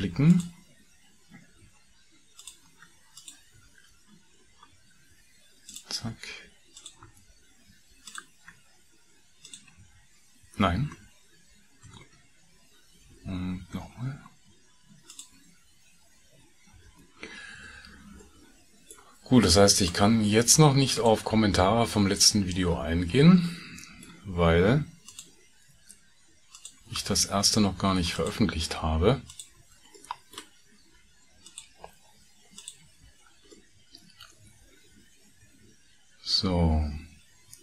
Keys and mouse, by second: 0.0 shift+2, 0.3 click, 2.8 2, 2.8 f, 3.1 click, 3.6 f, 6.8 click, 7.1 f, 9.4 shift+click, 9.8 f, 11.9 ctrl+z, 13.6 ctrl+z, 15.0 shift+click, 16.8 f, 20.2 shift+f, 20.9 middle click, 21.4 f, 23.4 middle click, 26.4 shift+middle click, 28.5 shift+f, 29.2 shift+middle click, 29.6 f, 30.0 middle click, 33.1 f, 33.5-35.9 middle drag, 36.0-37.6 middle drag.